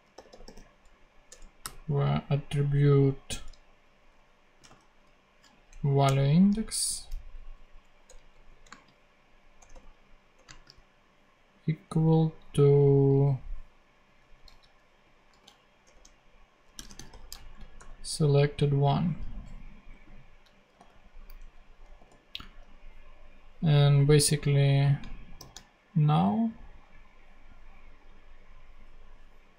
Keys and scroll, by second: 0.1 t, 0.4 r, 1.2 Return, 1.6 ., 4.5 v, 5.6 a, 5.6 Down, 6.0 Return, 6.9 alt+Return, 7.2 alt+Left, 8.0 alt+BackSpace, 8.3 super+Right, 8.6 super+space, 9.4 space, 9.5 =, 10.4 space, 14.4 super+c, 15.3 super+v, 15.8 super+[, 16.1-18.5 typing, 17.7 super+;, 21.3 Down, 21.9 ;, 25.3 shift+super+p.